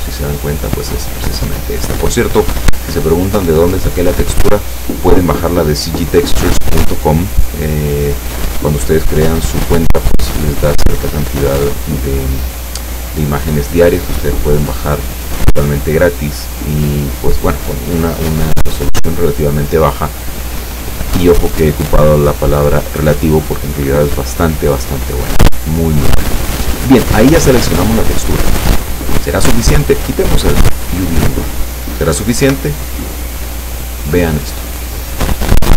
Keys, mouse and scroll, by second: 1.8 click, 23.7-24.0 scroll down 1, 24.6-24.9 scroll down 1, 26.7 scroll up 1, 26.8 scroll down 1, 27.4-27.7 scroll up 1, 30.3 click, 32.5 p.